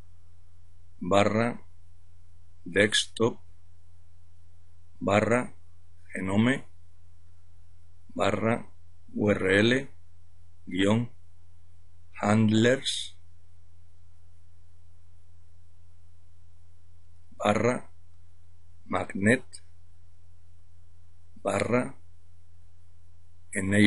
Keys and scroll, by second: 0.0-12.1 typing, 13.8-14.2 typing, 16.2-19.0 typing, 20.3-23.8 typing.